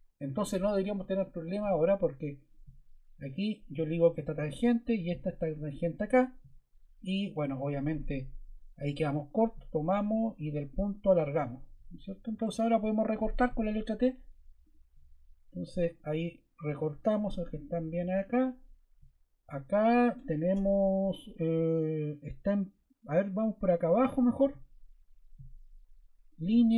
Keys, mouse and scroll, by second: 0.2-1.3 scroll, 8.4 ↺, 12.3 Escape, 13.3 t.